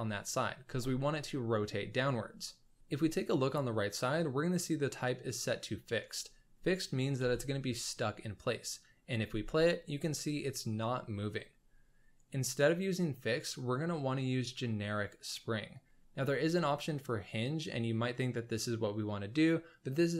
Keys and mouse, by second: 7.2 space, 9.2 space, 12.6-20.1 drag.